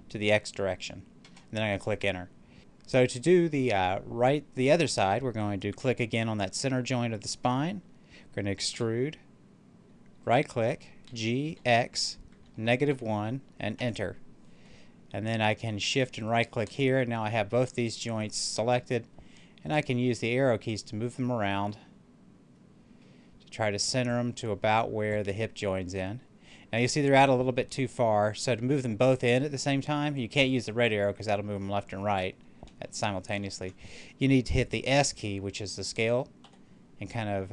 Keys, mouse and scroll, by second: 2.5 right click, 8.6 e, 10.1 right click, 11.0 g, 11.5 x, 12.5 -, 12.8 1, 13.7 Return, 16.2 shift+right click, 18.5-21.6 drag, 21.6-23.9 middle drag, 24.0-25.7 drag, 25.7-30.5 middle drag, 30.5-33.2 drag, 33.2 ctrl+z, 36.3 s.